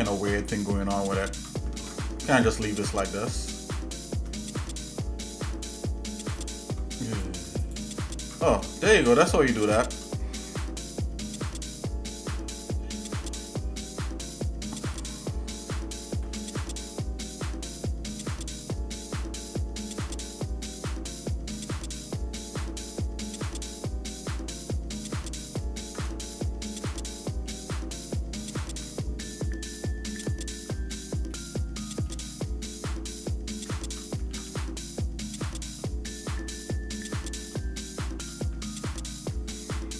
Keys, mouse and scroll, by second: 2.1 ctrl+Tab, 3.4 alt+shift+click, 4.4 click, 5.6 alt+shift+click, 6.4 alt+shift+click, 7.1 click, 7.6 ctrl+alt+click, 8.8-9.9 shift+middle drag, 16.2 ctrl+b, 26.2-27.5 shift+middle drag, 31.3 shift+middle click, 33.6 ctrl+KP_Add, 34.3 ctrl+z, 35.2 shift+middle click, 36.5 shift+middle click, 38.0 shift+middle click, 39.2 ctrl+b.